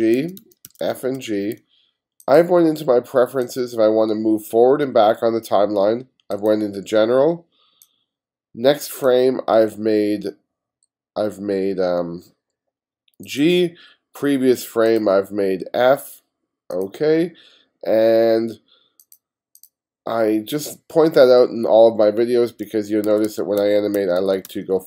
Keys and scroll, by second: 0.7 f, 22.7-24.8 typing.